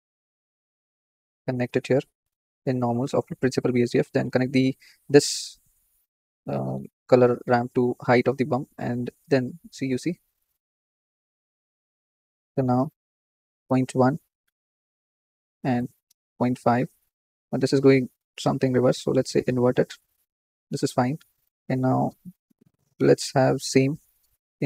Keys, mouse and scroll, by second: 0.0 shift+a, 1.8-2.9 drag, 5.3-7.9 drag, 10.6-11.4 shift+middle drag, 11.4-13.6 scroll up 1, 13.6-19.4 drag.